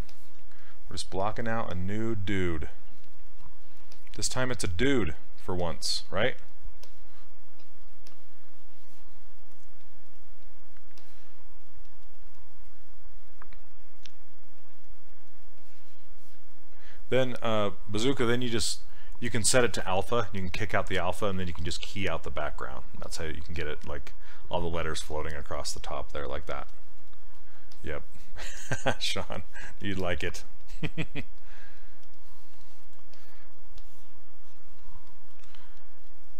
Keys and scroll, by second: 4.4 s.